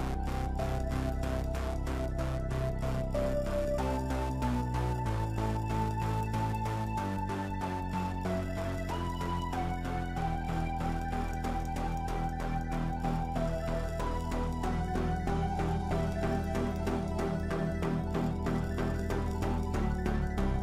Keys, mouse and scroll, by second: 0.0-4.4 middle drag, 4.4-8.2 drag, 8.8 i, 9.5-11.4 middle drag, 11.4-12.8 drag, 13.1-20.6 middle drag.